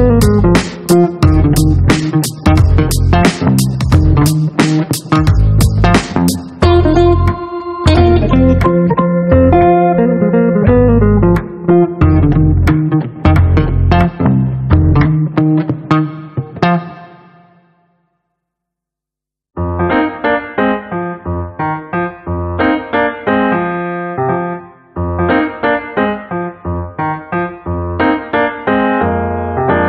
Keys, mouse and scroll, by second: 1.2 click, 2.9 click, 4.0 click, 6.1 click, 7.8 click, 12.7 click, 13.9 click, 15.1-16.5 drag, 18.7 ctrl+click, 20.8 click, 21.5 click, 23.2 click, 26.8 click.